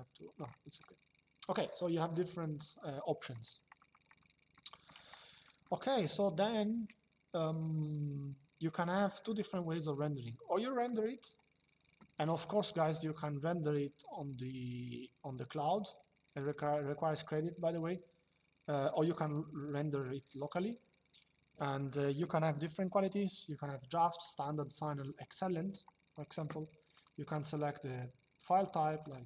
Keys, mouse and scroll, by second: 0.5 shift+middle click, 3.5 middle click, 4.2 shift+middle click, 5.1 middle click, 5.7 shift+middle click, 10.5 click, 19.0 click, 21.3 click, 26.6 click, 28.7 click.